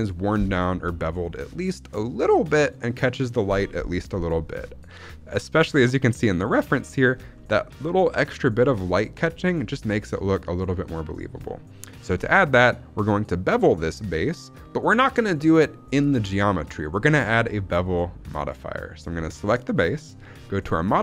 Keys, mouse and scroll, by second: 4.0 middle click, 4.3-6.6 scroll up 1, 6.6 middle click, 6.7-7.2 scroll down 3, 7.2 middle click, 9.6-10.1 scroll up 1, 10.1 scroll up 1, 10.1 middle click, 11.4-11.7 shift+middle drag, 12.0 scroll up 1, 12.2-12.7 shift+middle drag, 15.3 click.